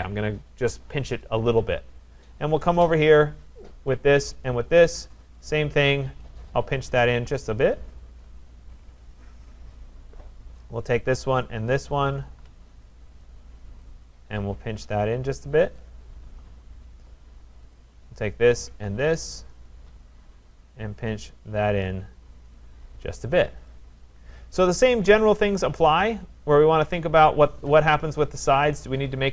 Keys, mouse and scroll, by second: 1.6-3.1 scroll, 3.1 click, 3.7 middle click, 3.7 click, 4.5 shift+click, 4.8 shift+click, 5.3 click, 8.2 click, 8.6 middle click, 8.6 shift+right click, 8.6 scroll down 4, 9.5-9.8 scroll up 4, 10.8 click, 10.8 scroll, 11.4 shift+click, 12.2 click, 13.2 click, 15.8 click, 16.2-17.5 scroll, 17.7 click, 18.7 shift+click, 19.7 click, 21.9 click, 22.6 click, 23.3 shift+click, 24.2-24.7 scroll, 26.3 click, 28.1 click.